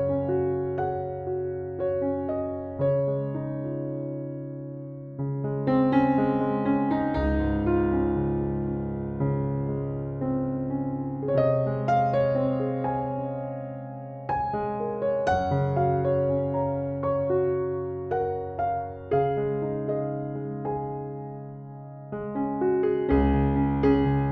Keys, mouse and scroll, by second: 1.1 Down, 1.5 Left, 2.4 Right, 3.3 Down, 3.7 Left, 5.4 Escape, 6.4-7.6 right drag, 8.4 F11, 9.0 right click, 10.7 click, 11.6 click, 12.4 right click, 16.0 click, 16.5-17.9 drag, 20.5 click, 22.9 middle click, 22.9 scroll up 2.